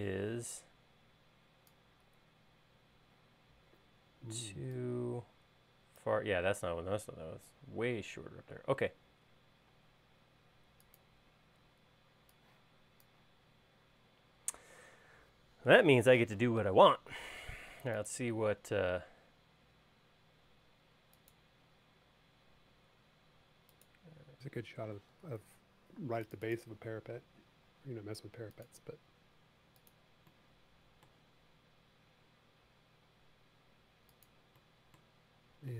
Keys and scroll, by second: 10.4 e, 14.6 l, 25.3 e, 27.8 l, 35.6 l.